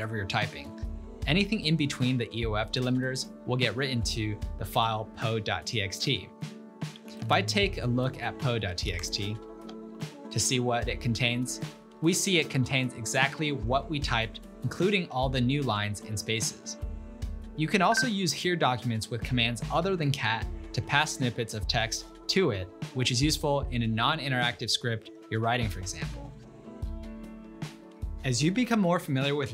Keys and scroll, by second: 6.6-10.1 typing, 16.1-16.6 typing.